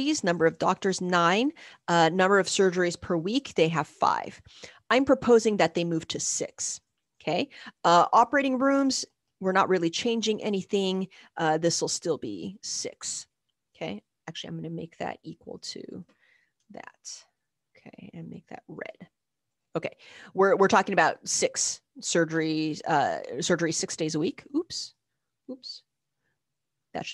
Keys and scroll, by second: 0.1 Down, 0.4 Down, 2.0-3.3 typing, 3.6 Right, 5.5 Left, 5.8 Right, 5.8 typing, 6.7 Down, 6.8 Down, 7.2 Down, 7.3 Down, 7.6 Left, 8.7 typing, 9.0 Down, 9.2 Down, 9.5 Down, 9.6 Down, 10.0 Down, 10.0 Down, 10.4 Down, 11.6 6, 12.3 Down, 14.2 =, 16.6 Return, 26.2 shift+=.